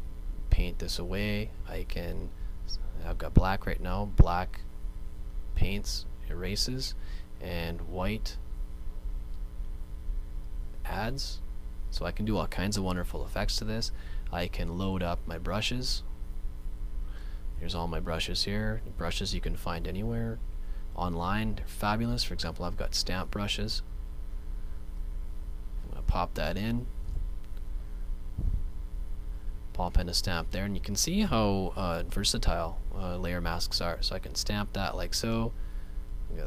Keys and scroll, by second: 27.1 super+z, 30.8 super+z, 32.0 ], 32.3 ], 33.0 ], 35.4 space.